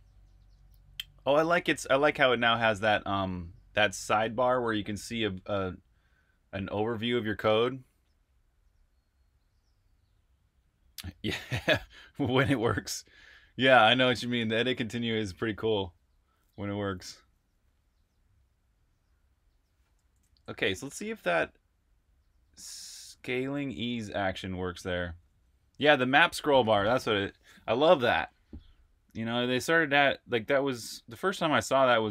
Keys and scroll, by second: 14.5 Return, 15.0 k, 19.7 j, 19.8 j, 21.8 typing, 25.0 super+r, 25.4 super+h, 26.0 super+h.